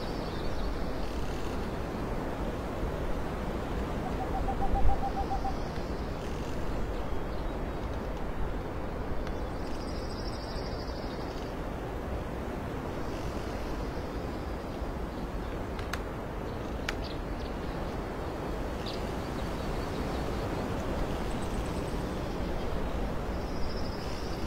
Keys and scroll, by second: 0.5 alt+space, 2.1 space, 2.9 space, 3.6 ctrl+alt+shift+z, 3.9 ctrl+alt+shift+space, 5.6 x, 10.4 x, 11.2 x, 12.7 alt+x, 13.0 ctrl+alt+z, 13.2 ctrl+alt+x, 14.7 ctrl+z, 18.0 alt+x.